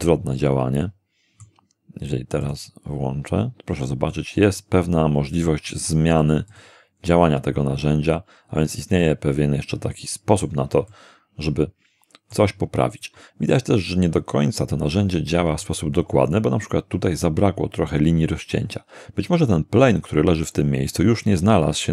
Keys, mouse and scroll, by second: 0.4-1.6 middle drag, 2.4 click, 4.1-5.7 middle drag, 6.5 click, 9.0-10.6 middle drag, 10.9-12.5 middle drag, 14.9-15.7 scroll up 2.